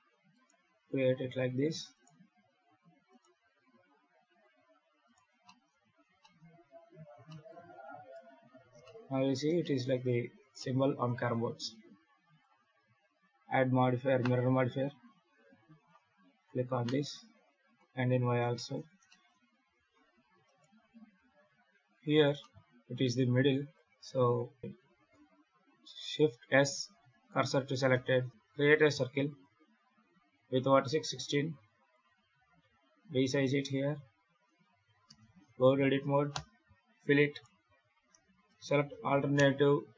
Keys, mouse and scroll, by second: 0.2 right click, 0.5 e, 1.8 right click, 2.0 e, 3.0 right click, 3.1 e, 4.9 right click, 5.3 shift+middle click, 5.6-5.9 scroll down 3, 6.1 shift+middle click, 7.2 shift+middle click, 7.7 scroll down 3, 8.0 Tab, 8.5 scroll down 1, 8.7 shift+middle click, 9.2 scroll down 2, 9.5 shift+middle click, 10.2 scroll down 2, 10.5 shift+middle click, 12.2 click, 15.6 click, 17.5 click, 18.4 shift+middle click, 18.7 scroll down 2, 18.9 shift+middle click, 19.6 alt+a, 20.3 right click, 21.0 KP_Decimal, 21.5-22.1 scroll down 14, 22.1 scroll up 1, 22.3 middle click, 24.2 KP_7, 24.7 ctrl+z, 26.0 shift+s, 26.7 shift+s, 28.3 scroll down 7, 28.3 shift+a, 30.2 click, 31.4 click, 31.8 click, 32.3 s, 34.9 Tab, 35.4-36.2 scroll up 7, 36.2 f, 37.2 right click, 38.4 shift+right click.